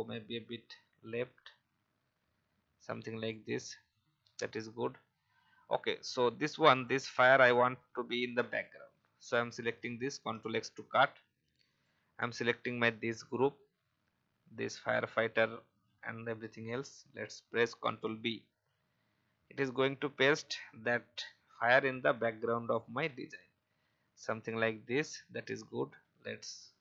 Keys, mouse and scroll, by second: 11.6 click, 21.9-26.8 drag.